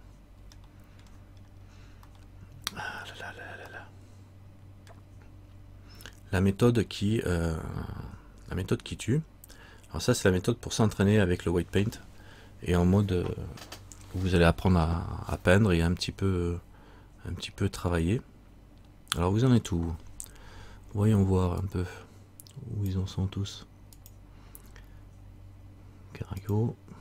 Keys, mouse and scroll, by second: 0.8 shift+middle click, 1.6-2.1 scroll down 1, 2.3 middle click, 3.8 scroll down 1, 3.9 middle click, 5.6-6.1 scroll up 1, 7.0 scroll up 1.